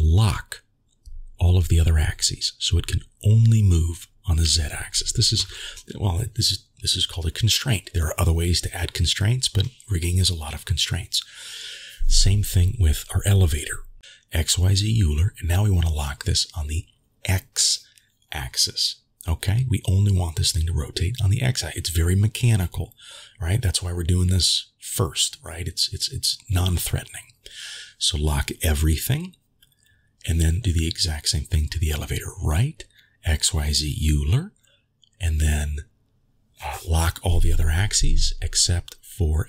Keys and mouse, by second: 0.2 click, 0.8 click, 5.3-6.5 drag, 7.0 ctrl+z, 7.8-8.4 middle drag, 12.0 shift+middle drag, 12.9-13.4 middle drag, 15.6-17.6 drag, 18.1 ctrl+z, 19.1-23.5 drag, 23.9 ctrl+z, 29.4 click, 32.3-33.3 drag, 33.7-34.1 shift+middle drag, 34.4 middle click, 35.5-36.9 drag, 37.1 ctrl+z, 38.6 drag.